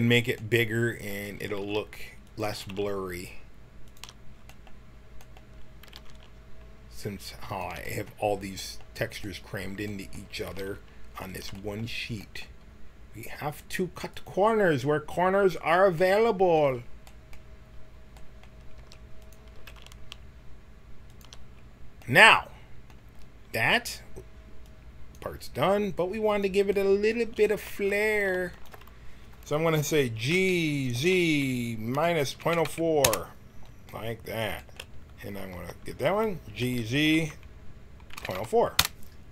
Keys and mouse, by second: 1.6 g, 2.4 g, 5.9 g, 10.5 g, 13.6 click, 18.7 s, 19.5 s, 24.3 middle click, 24.8-26.0 drag, 26.7-30.3 middle drag, 30.3 g, 33.8 middle click, 35.8 right click, 36.6 g.